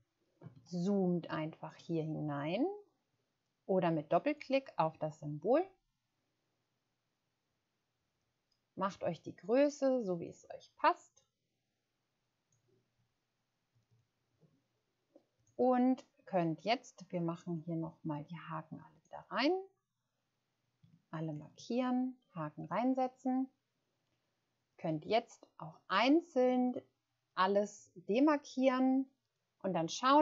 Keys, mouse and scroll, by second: 0.5-1.6 ctrl+scroll up 1, 1.9 ctrl+scroll up 2, 4.4 click, 13.9 click, 19.3-19.6 scroll down 1.